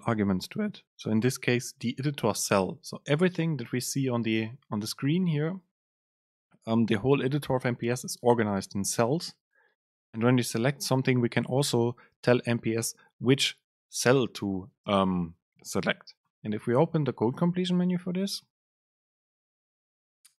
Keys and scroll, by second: 15.2 super+space.